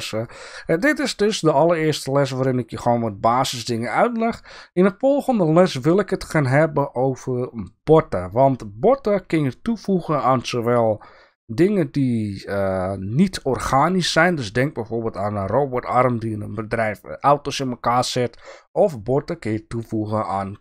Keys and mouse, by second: 0.3 click.